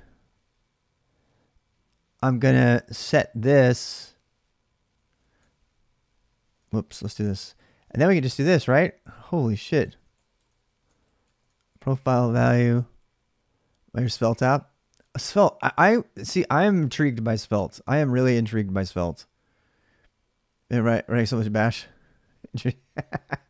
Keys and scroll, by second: 2.1-2.5 j, 3.4-3.8 l, 5.1 shift+i, 6.2-11.7 typing.